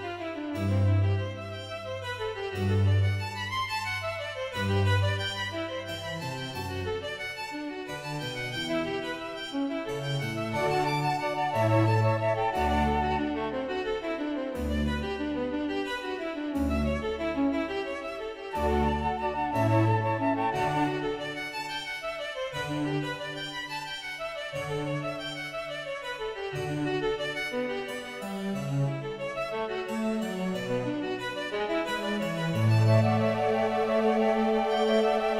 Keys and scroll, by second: 30.9 ctrl+b.